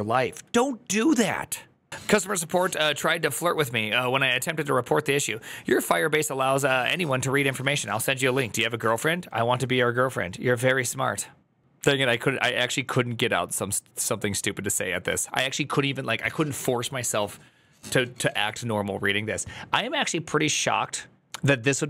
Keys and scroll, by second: 0.3 alt+[.